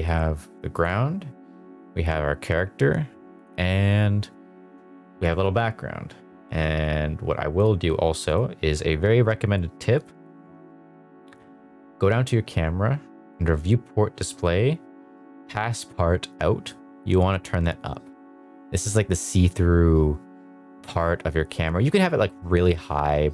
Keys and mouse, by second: 0.7 click, 3.3 click, 8.3 click, 9.9 click, 16.6-22.5 drag.